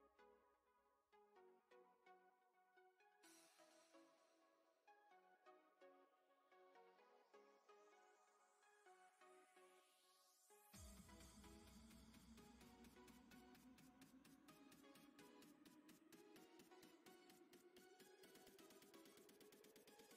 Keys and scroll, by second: 3.3-4.7 typing, 8.8 s, 9.9 s, 16.7 s, 19.3 s.